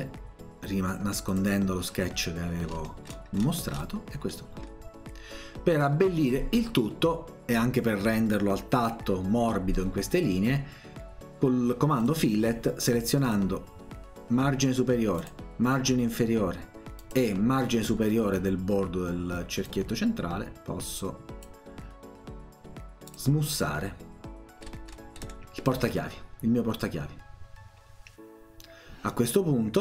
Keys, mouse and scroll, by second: 1.3 click, 2.7-3.3 scroll down 2, 3.4-4.1 scroll down 2, 4.3 middle click, 12.1 click, 13.3 click, 15.2 click, 17.0 click, 19.7-21.4 drag, 23.1 click, 24.7-25.3 scroll down 2, 25.3 scroll up 2, 27.9-28.8 scroll down 2.